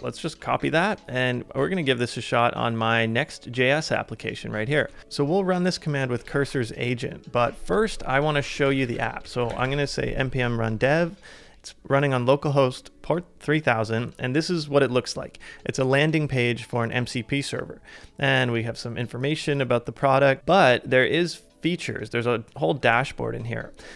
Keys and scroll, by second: 4.9 super+Tab, 6.3 super+Tab, 8.0-10.0 typing.